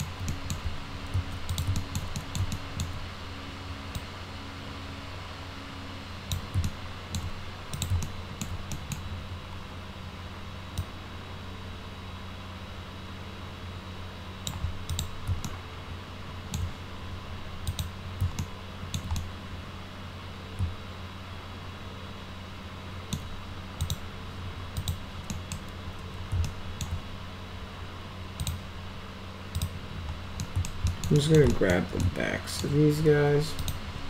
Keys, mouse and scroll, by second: 0.3 middle click, 1.5 click, 1.8 alt+middle click, 2.2 middle click, 2.6 alt+middle click, 4.0-6.3 drag, 6.7 alt+middle click, 7.8 click, 8.0 alt+middle click, 8.7 middle click, 10.8-14.5 drag, 14.9 click, 15.5-16.6 alt+middle drag, 17.7 click, 18.4 alt+middle click, 19.2-23.2 middle drag, 23.8 click, 24.8 click, 25.3 middle drag, 26.5 alt+middle click, 28.4 click, 29.6 click, 30.4 alt+middle drag, 30.9 alt+middle click, 31.2 middle click, 31.5 alt+middle click, 32.0-32.6 alt+middle drag, 33.6 ctrl+click.